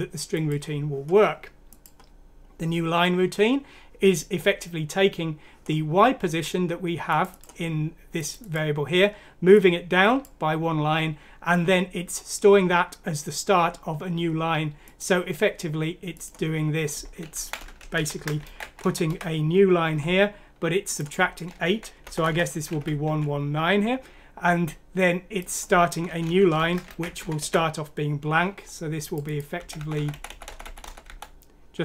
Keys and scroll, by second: 17.6 Home, 18.0 End, 18.4 ctrl+c, 18.6 Down, 18.8 Down, 19.1 ctrl+v, 21.7 Right, 21.9 ctrl+z, 22.7-23.0 typing, 26.2 Up, 26.6 shift+End, 27.2 ctrl+c, 29.6 Delete, 29.8 Delete, 29.9 Delete, 30.2 Delete, 30.4 Delete.